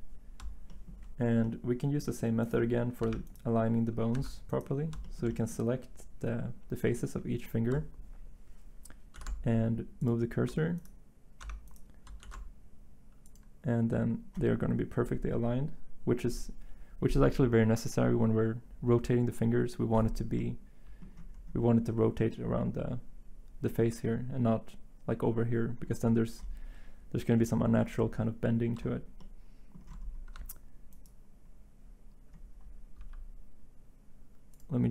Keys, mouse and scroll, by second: 2.0 typing, 3.0 Tab, 4.1 Tab, 4.9 typing, 9.1 s, 10.5 Tab, 11.4 Tab, 12.2 s, 30.3 Tab, 33.0 n.